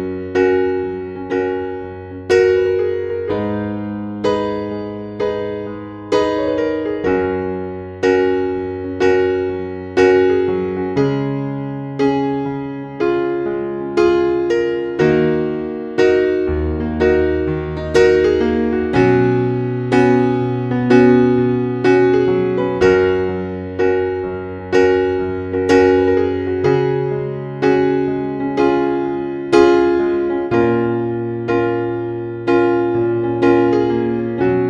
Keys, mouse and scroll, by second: 0.6 scroll down 1, 1.7-2.4 scroll up 1, 2.4 scroll down 1, 3.6 scroll up 1, 4.5-4.9 scroll down 1, 6.1-6.7 scroll up 1, 6.7-7.5 scroll down 1, 7.6 scroll up 1, 8.5 Page_Down, 9.5 scroll up 1, 11.5 scroll down 1, 12.8-14.2 scroll up 1, 14.2 scroll down 1, 15.3 scroll up 1, 16.0-17.0 scroll down 1, 17.0-18.0 scroll up 1, 18.0-19.0 scroll down 1, 19.0-19.8 scroll up 1, 20.1-20.4 scroll down 1, 21.2 Page_Down, 22.9-23.3 scroll up 1, 23.6 scroll down 1, 25.4-25.7 scroll up 1, 25.9 scroll down 1, 26.9 scroll up 1, 27.2-28.3 scroll down 1, 28.3 click, 30.1 Page_Up, 30.9 Page_Up, 32.9 Page_Up, 33.8 Page_Down, 34.2 Page_Down.